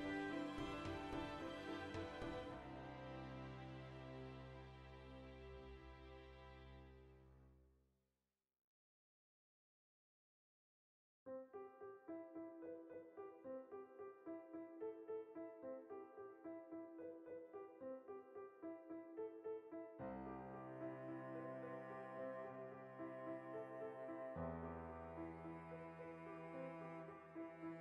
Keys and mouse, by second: 0.0 ctrl+r, 1.3 click, 1.5 ctrl+r, 2.2 click, 2.4 ctrl+r, 3.5 click, 3.8 ctrl+r, 4.4 right click, 4.5-6.2 middle drag, 5.1 Tab, 6.2 right drag, 6.4-8.2 middle drag, 8.2-11.1 right drag, 11.1-11.7 middle drag, 11.1 click, 11.7-12.4 right drag, 12.4-14.2 ctrl+middle drag, 14.2 shift+right click, 14.7 ctrl+j, 15.5 right click, 16.0 Tab, 16.2 shift+middle click, 16.6 right click, 17.1 l, 18.1-20.5 middle drag, 20.5 right click, 20.9 3, 21.2-22.4 middle drag, 22.4 right click, 23.3-24.6 shift+middle drag, 24.3 ctrl+r, 24.6 right click, 24.8 ctrl+r, 25.3 alt+shift+right click, 25.8 ctrl+b, 27.1 click, 27.6 ctrl+r.